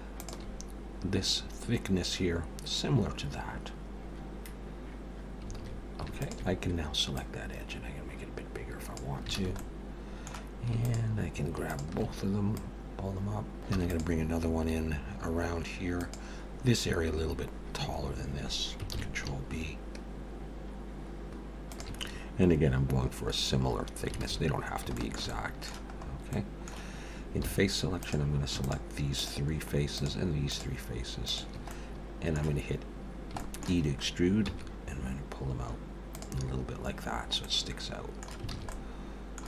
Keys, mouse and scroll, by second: 5.6 alt+a, 6.2 alt+shift+click, 7.2 click, 9.4 alt+a, 9.5 middle click, 10.8 alt+shift+click, 12.0 alt+shift+click, 12.5 click, 13.7 ctrl+r, 13.7-14.2 scroll down 4, 18.8 ctrl+b, 22.1-22.6 scroll up 4, 24.3 alt+a, 24.6 scroll down 3, 24.9 shift+middle click, 25.3 middle click, 25.9-26.3 scroll up 2, 26.3 middle click, 27.5 3, 27.9 click, 28.6 shift+click, 29.3 click, 30.0 shift+click, 31.0 shift+click, 31.3 shift+click, 31.6 middle click, 33.4 shift+middle click, 33.8-34.3 scroll up 3, 34.5 e, 37.4 middle click, 38.5 alt+a, 38.7 middle click.